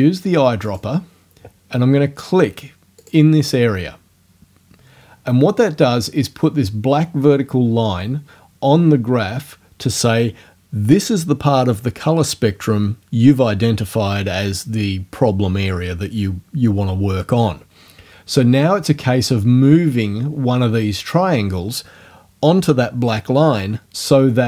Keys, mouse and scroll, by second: 0.7 click, 3.0 click.